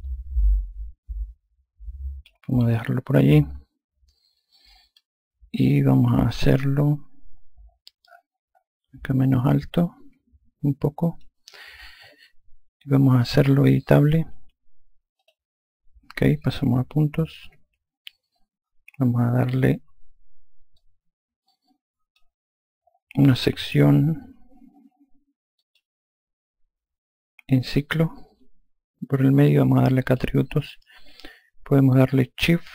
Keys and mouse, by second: 0.0 click, 6.3 F1, 9.7 click, 15.1 click, 20.7 click, 25.6 click, 30.0 click.